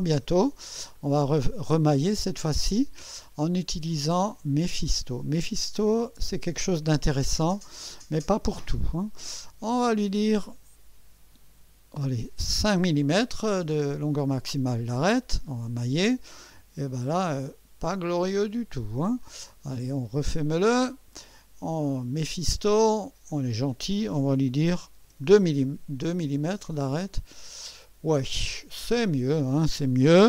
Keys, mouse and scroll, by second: 0.9 click, 2.7 click, 7.6 click, 10.1 click, 12.7 5, 15.5 click, 17.0-18.3 drag, 19.2 click, 20.7 click, 22.2 click, 23.3 click, 25.0 2, 26.8 click, 28.3-29.8 drag.